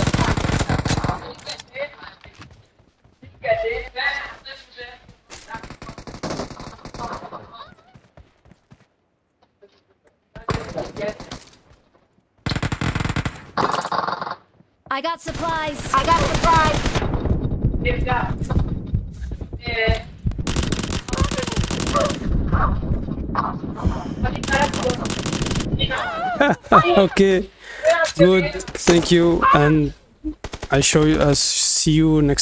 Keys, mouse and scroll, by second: 0.0-1.3 typing, 2.5 d, 3.7 w, 4.6 a, 5.8 a, 8.2-16.1 typing, 10.6 right click, 14.9-18.3 drag, 17.5-18.8 typing, 19.9 space, 20.0-21.4 drag, 20.8 a, 22.7-25.6 typing, 25.0 click.